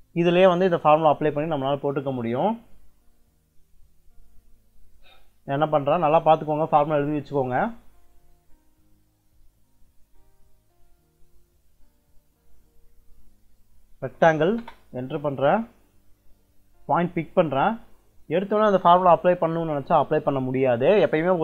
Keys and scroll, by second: 13.6-14.5 typing.